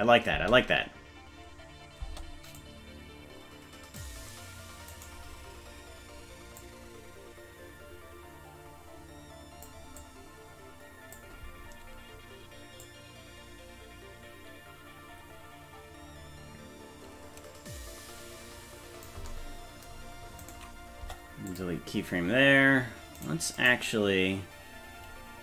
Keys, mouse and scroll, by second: 0.3 space, 2.0 space, 2.6-4.0 drag, 4.9 right click, 6.6-9.7 drag, 10.0-11.2 drag, 12.9-19.1 drag, 20.5 right click, 21.1 Delete, 23.3 right click, 23.6 click.